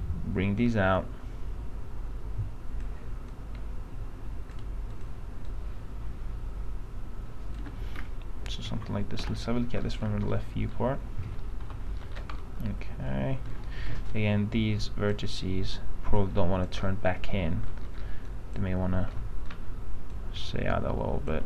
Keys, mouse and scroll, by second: 0.0-2.4 shift+drag, 3.5-4.7 shift+drag, 5.1-7.8 shift+drag, 9.4 l, 10.0-11.6 middle drag, 11.8 p, 12.2 middle click, 12.6 alt+middle click, 14.3-17.0 drag, 17.3 alt+middle click, 18.0-18.4 scroll up 1, 18.4 click, 19.2 alt+middle click, 20.2 click.